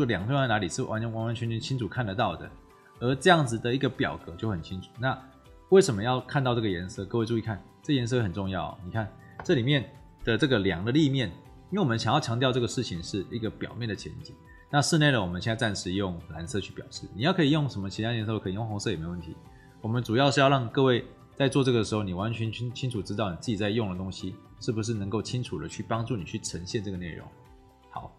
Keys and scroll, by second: 2.2 Escape.